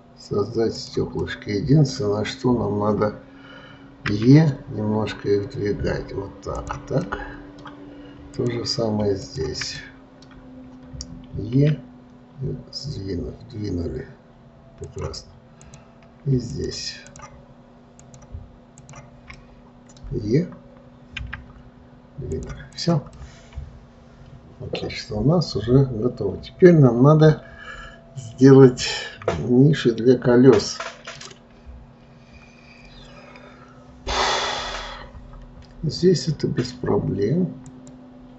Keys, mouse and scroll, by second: 1.6-4.4 middle drag, 4.4 e, 7.4-8.7 middle drag, 8.7 click, 9.6 shift+click, 10.1-11.9 middle drag, 11.9 e, 16.0 click, 16.9 shift+click, 17.5 shift+click, 18.3 shift+click, 19.1 shift+click, 19.7-21.5 middle drag, 21.5 e, 23.1 click, 23.5-26.5 middle drag, 33.0-36.0 scroll down 2, 38.0 click.